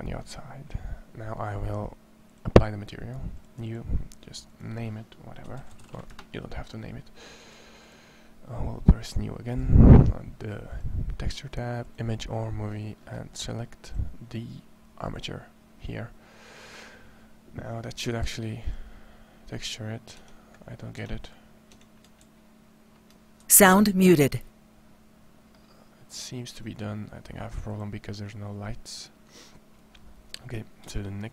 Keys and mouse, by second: 18.4 click, 20.0 Tab, 20.8 Tab, 21.6 Tab, 22.0 ctrl+a, 23.2 ctrl+n, 23.6 Tab, 30.3-31.3 middle drag.